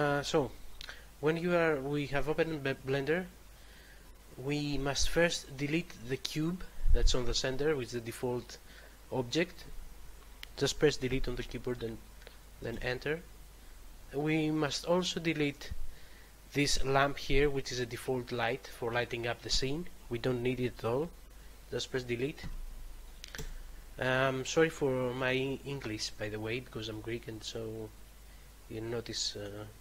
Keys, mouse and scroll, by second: 11.0 Delete, 12.7 Return, 17.3 right click, 22.8 Delete, 23.3 Return.